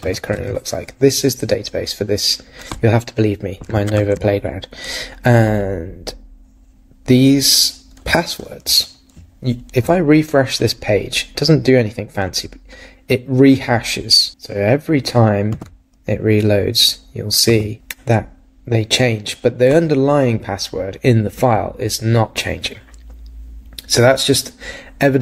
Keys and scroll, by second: 0.0 super+r, 3.9 super+Tab, 14.3 super+r, 15.5 super+r.